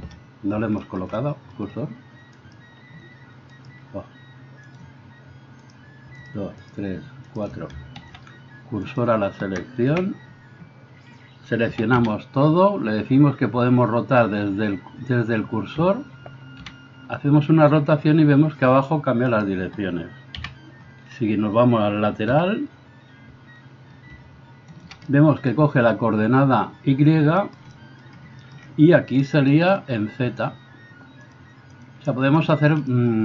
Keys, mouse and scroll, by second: 2.4-5.9 middle drag, 2.4-5.9 right drag, 6.2 shift+middle click, 6.2 shift+right click, 8.0 shift+s, 9.9 KP_1, 11.7 a, 12.0 a, 16.6 r, 20.3 KP_3, 22.3 r, 24.9-31.2 middle drag, 31.2-33.2 drag.